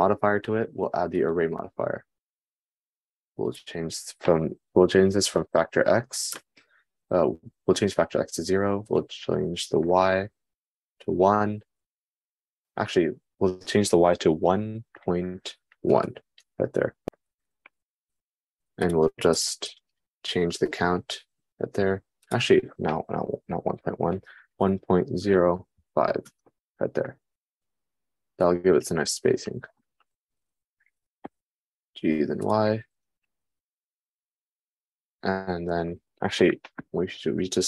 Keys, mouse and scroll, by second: 0.2-33.1 drag, 32.0 g, 33.1 middle click, 37.4 r.